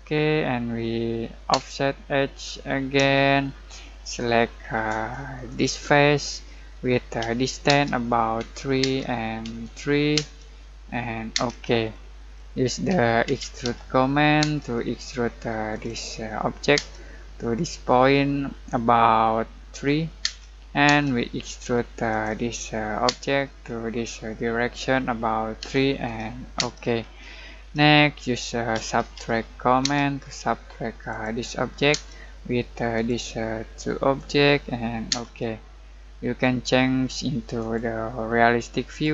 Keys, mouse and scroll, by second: 3.2-5.4 shift+middle drag, 5.4 click, 7.2-10.1 typing, 11.9 middle click, 12.6-14.4 typing, 15.7 click, 16.7 space, 19.7 3, 20.2 space, 22.1 click, 23.0 space, 25.6 3, 26.5 space, 28.7-29.8 typing, 31.1 click, 31.9 space, 32.9 click, 35.1 space, 35.7 scroll down 1, 36.0-37.5 middle drag.